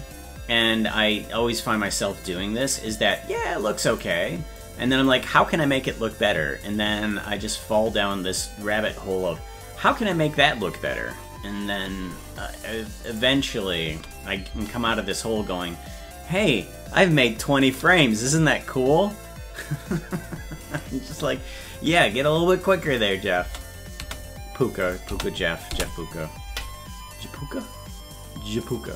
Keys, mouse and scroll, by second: 3.2 click, 4.6 click, 13.1 click, 13.9 space, 22.9 click, 23.4 space, 24.8 click, 25.1 space, 28.7 click.